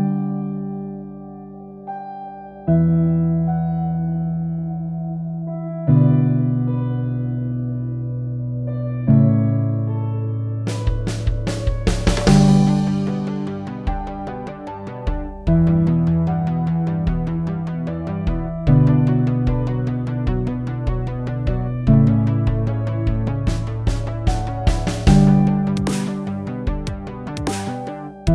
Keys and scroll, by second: 0.3-3.8 typing, 6.2-7.9 typing, 9.0 typing.